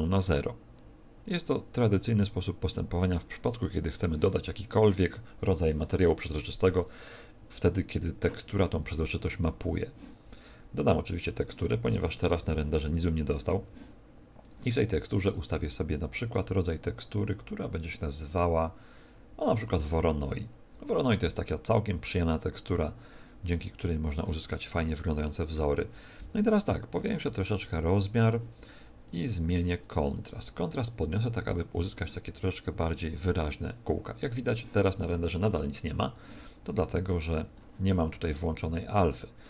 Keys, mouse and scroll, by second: 13.4 F12, 13.4 Escape, 14.4 click, 15.3 click, 16.3 click, 27.0 click, 27.4 click, 29.8 click, 35.8 Escape, 36.7-37.8 scroll down 19.